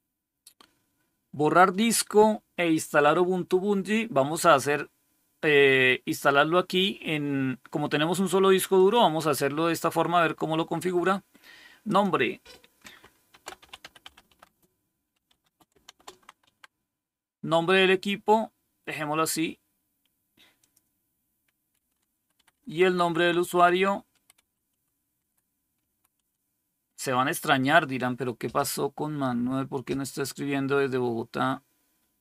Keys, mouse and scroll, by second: 8.7 click, 11.8 click, 13.0-16.9 typing, 20.5 click, 21.6 Right, 22.3 Left, 22.4 Left, 22.6 Left, 22.7 Left, 22.9 Left, 23.3 Left, 23.4 Left, 24.3 Right, 24.3-26.6 typing.